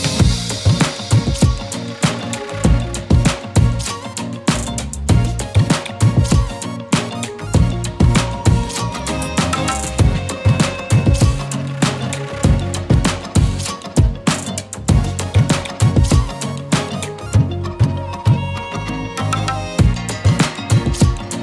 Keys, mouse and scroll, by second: 0.0 click, 1.5-10.5 alt+drag, 12.9 click, 13.2 scroll up 1, 13.5-16.5 typing, 13.9 click, 14.2 click, 15.0 click, 15.6-16.9 click, 16.0 click, 16.3 click, 16.5 click, 19.0 right click, 20.3-21.4 drag.